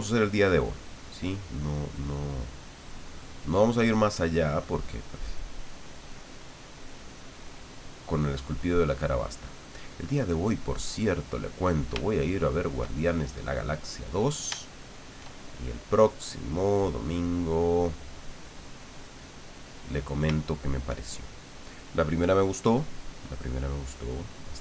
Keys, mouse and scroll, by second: 0.5 click, 1.3 click, 1.9-4.1 drag, 4.2-6.2 drag, 6.4 click, 11.5-12.8 middle drag, 13.3-14.5 drag, 14.6 shift+click, 15.2 shift+click, 16.1 click, 16.9-18.5 drag, 19.2 middle click, 20.4 shift+middle click, 21.7 middle click, 22.7 middle click.